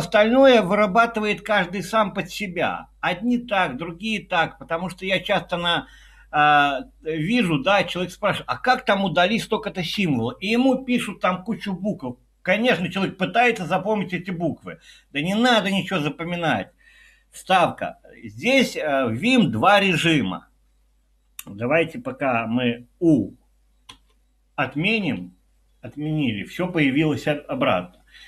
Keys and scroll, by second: 17.6 typing, 23.9 typing.